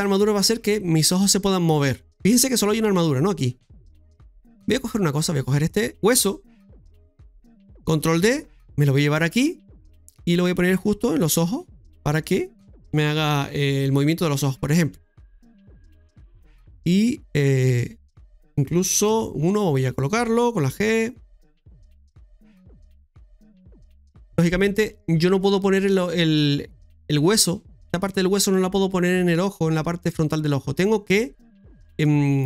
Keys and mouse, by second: 5.1 right click, 8.1 shift+d, 12.2 right click, 14.3-17.1 typing, 16.6 right click, 17.2-18.4 middle drag, 19.1 KP_1, 20.7 s, 23.5 middle click, 31.5 middle click, 32.0 shift+middle click.